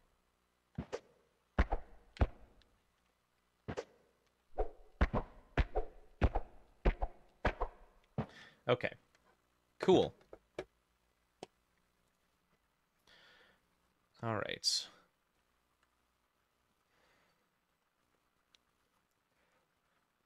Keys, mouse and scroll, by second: 13.1 scroll up 1, 13.5 middle click, 14.1-14.7 scroll up 2, 15.4 middle click, 17.2-17.8 scroll down 1, 17.8-18.1 scroll up 1, 18.1 middle click, 19.4 middle click.